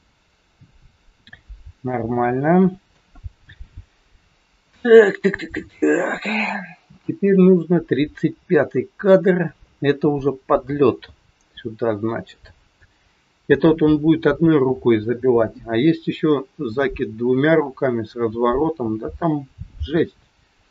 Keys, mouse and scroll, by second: 1.8 shift+middle click.